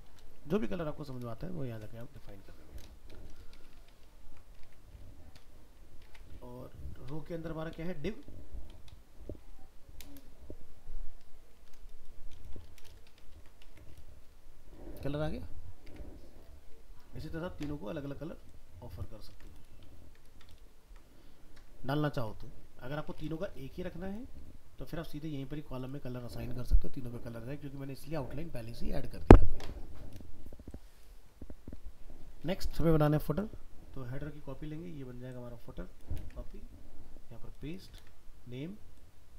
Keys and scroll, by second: 4.1 ctrl+s, 4.6 alt+Tab, 13.3 ctrl+s, 13.7 alt+Tab, 19.3 ctrl+c, 19.9 ctrl+v, 36.2 ctrl+c, 38.0 ctrl+v.